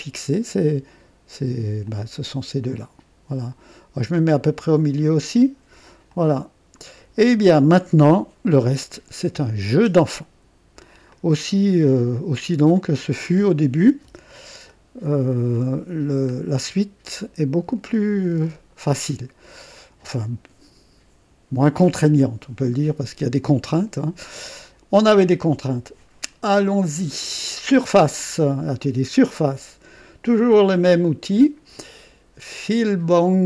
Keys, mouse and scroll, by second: 1.8-4.7 drag, 6.0 click, 7.1 scroll down 1, 7.7-10.9 drag, 11.1-13.1 drag, 14.0 KP_0, 14.7 right click, 15.5 right click, 16.3-16.7 scroll up 1, 17.0 right click, 24.9 click, 28.9 click.